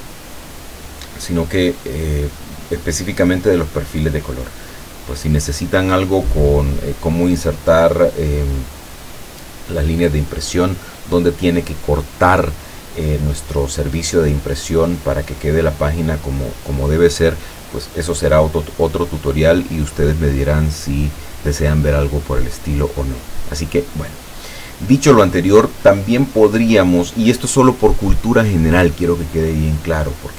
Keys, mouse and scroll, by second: 22.4 click, 23.1 click.